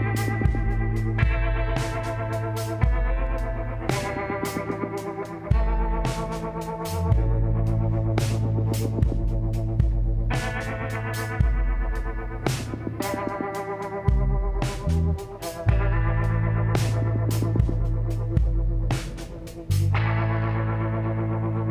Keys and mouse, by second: 0.3 b, 4.0-5.6 drag, 8.5 click, 9.0 middle click, 9.9 click, 10.0 middle click, 10.8-12.4 drag, 14.1-15.7 drag, 16.3-17.9 drag.